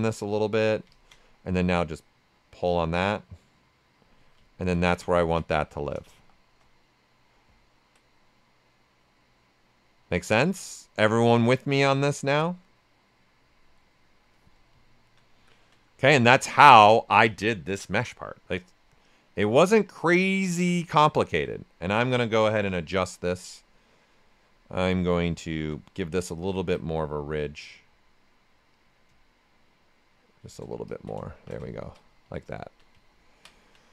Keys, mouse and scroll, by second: 1.7-4.4 drag, 4.4 ctrl+right click, 4.8 q, 5.6 ctrl+right click, 6.1 shift+f, 6.6 right click, 8.0-10.6 right drag, 11.9-13.9 drag, 15.1 alt+right click, 15.4 alt+right click, 16.0 shift+f, 16.6 ctrl+right click, 18.0-20.9 right drag, 21.2 alt+click, 21.8 ctrl+right click, 22.3 shift+f, 22.8 ctrl+right click, 24.7 space, 26.1 right click, 28.7-30.8 drag, 31.5 shift+f, 31.6 ctrl+right click, 33.0 ctrl+right click, 33.8-33.9 right drag.